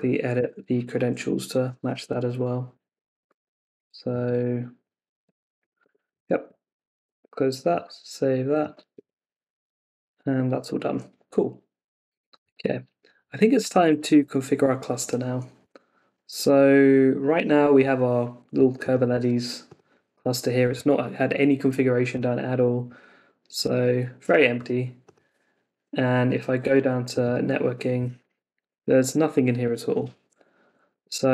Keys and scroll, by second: 0.3 Return, 2.7 Down, 5.8 Escape, 6.9 super+w, 8.9 super+Tab, 16.1 super+Tab, 30.9 super+Tab.